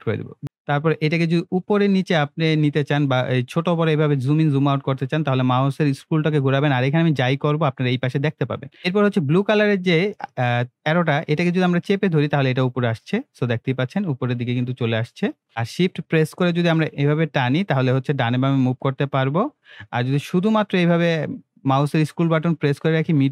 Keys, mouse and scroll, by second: 1.3 scroll down 1, 1.5 scroll up 1, 1.9 scroll down 1, 3.0 scroll up 1, 3.2 scroll down 1, 3.5 scroll up 1, 3.8 scroll down 1, 4.0 scroll up 1, 4.4 scroll down 1, 4.5 scroll up 1, 4.8 scroll down 1, 5.8 scroll up 1, 8.5 scroll up 1, 8.7 scroll, 9.4-13.8 drag, 14.4 scroll down 1, 14.8 scroll up 1, 15.5-18.8 shift+middle drag, 19.9-23.3 middle drag.